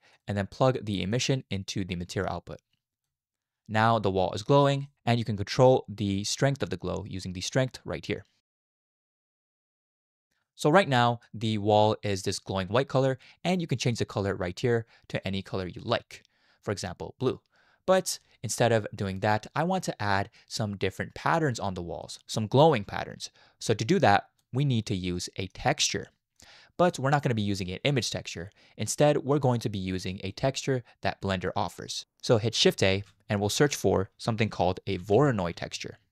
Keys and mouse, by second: 1.1 click, 1.4-3.1 drag, 4.9 middle click, 7.6-10.2 drag, 10.8-11.2 middle drag, 23.9 click, 25.3 middle click, 26.4 click, 29.0 middle click, 32.9 shift+a.